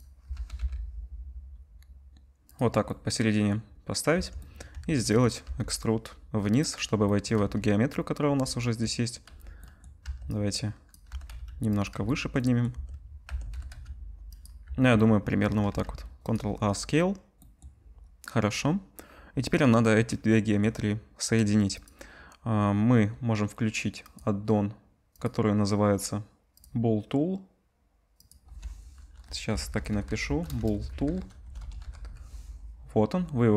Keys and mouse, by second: 0.0-4.2 drag, 0.3 g, 4.2 Tab, 4.7 a, 5.4 e, 7.4 z, 8.2 click, 8.2 z, 9.3 z, 9.4 click, 10.0 1, 10.2-11.9 drag, 10.2-11.9 middle drag, 10.2-11.9 right drag, 11.1 g, 11.9 z, 12.3 click, 12.7 Tab, 13.2 Tab, 13.5 g, 14.6 Tab, 15.1-33.5 drag, 15.7 ctrl+a, 24.2-33.5 middle drag, 24.2-33.5 right drag.